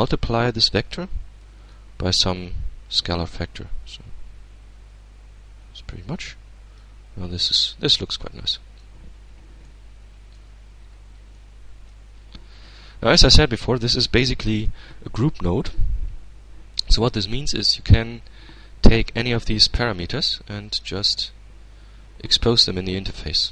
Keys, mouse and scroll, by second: 0.5-1.2 middle drag, 2.3-6.2 drag, 7.1-8.3 drag, 8.7-9.8 middle drag, 10.4 middle click, 11.2-11.6 scroll down 1, 11.6-12.6 middle drag, 12.8-14.1 middle drag, 15.8-17.1 middle drag, 19.1-20.3 drag, 21.7-22.7 drag.